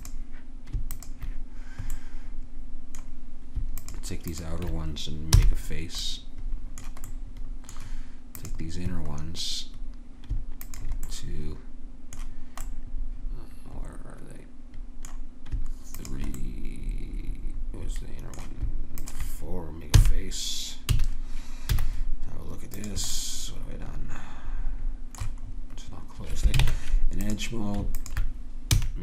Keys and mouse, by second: 5.3 f, 10.2 click, 10.6 click, 11.8 middle click, 12.7-14.2 middle drag, 16.0-17.8 drag, 19.0-20.8 right drag, 20.0 f, 20.9 a, 21.7 z, 23.1 click, 26.6 ctrl+Tab, 28.0-29.0 drag, 28.7 f.